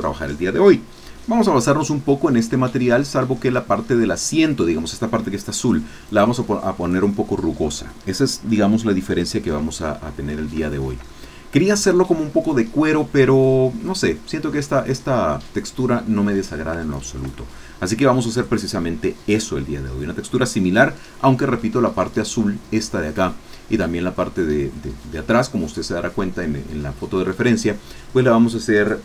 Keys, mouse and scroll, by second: 6.2 click, 9.3 middle click, 10.2 scroll up 2, 10.6 shift+middle click, 11.1 shift+middle click, 16.5 scroll down 2, 16.9 shift+middle click, 17.5 shift+click.